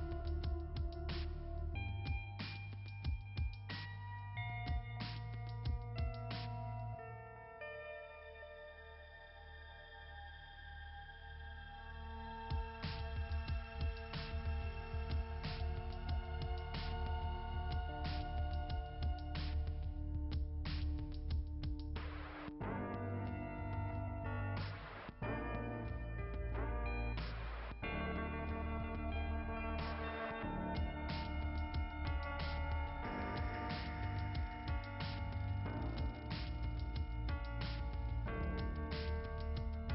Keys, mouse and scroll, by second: 0.7-3.5 typing, 3.4 scroll up 2, 3.6 scroll down 1, 3.7 scroll up 1, 3.8 scroll down 2, 10.3 alt+s, 10.4 right click, 10.5-12.2 typing, 14.2-16.5 typing, 14.3 click, 21.7 alt+s, 21.9-23.8 typing, 27.5 click, 29.5 click, 32.7 scroll down 1, 33.3-33.8 scroll down 1.